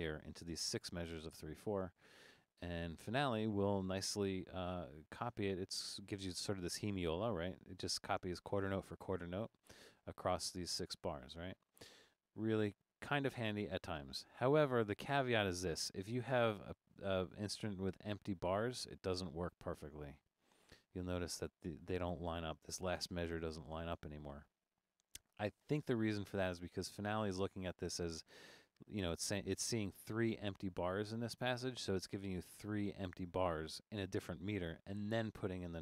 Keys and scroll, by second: 13.0 super+z.